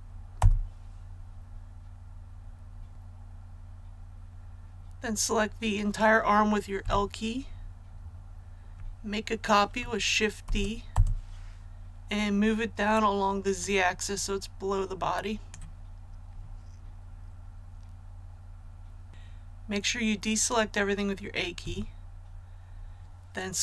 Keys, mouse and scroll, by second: 0.3 Return, 6.8 typing, 10.8 Return, 13.5-15.7 drag, 21.5 a.